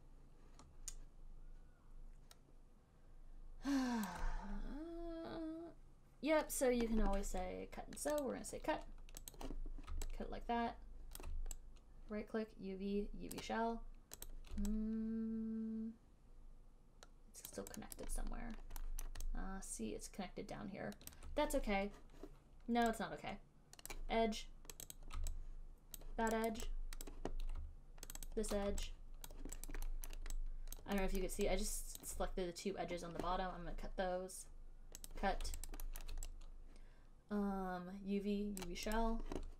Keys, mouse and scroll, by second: 2.2 shift+click, 4.3 alt+click, 8.5 click, 9.7 click, 11.4 alt+click, 13.7 right click, 14.5 middle click, 17.8 alt+click, 18.2 alt+click, 19.3 alt+right click, 19.3 alt+middle click, 20.7 alt+middle click, 21.4 alt+click, 24.3 right click, 25.2 click, 25.3 click, 25.3 alt+click, 26.3 alt+click, 26.8 alt+click, 27.4 alt+click, 27.4 alt+middle click, 28.5 shift+click, 28.6 shift+click, 29.6 alt+click, 30.0 alt+click, 30.3 alt+middle click, 31.1 alt+click, 31.3 alt+right click, 31.5 alt+middle click, 32.3 alt+click, 35.4 click, 36.0 alt+right click, 36.3 alt+middle click, 38.8 right click, 39.3 right click.